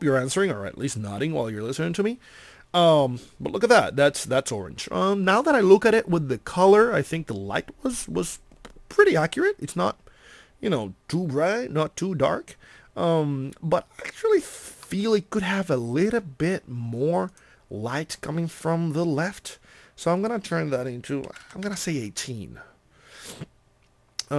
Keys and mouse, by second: 15.8 middle click.